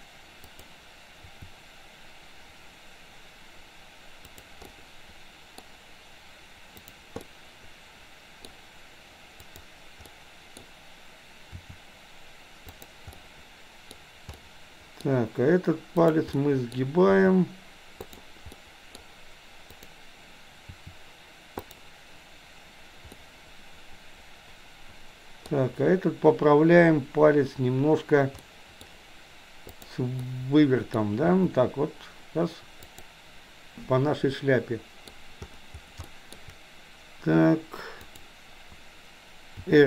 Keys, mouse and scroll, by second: 0.5 click, 1.2 r, 4.7 middle click, 6.8 click, 7.2-8.5 middle drag, 9.5 click, 10.1 middle click, 11.6 r, 13.2 middle click, 14.5-15.1 middle drag, 16.1 click, 16.3-16.8 middle drag, 17.2 r, 18.6 middle click, 19.7 click, 20.7 r, 23.2-25.5 middle drag, 28.5 middle click, 29.7 click, 30.3 middle click, 31.2 r, 33.8-35.2 middle drag, 36.0 shift+middle click, 38.2 click, 39.6 r.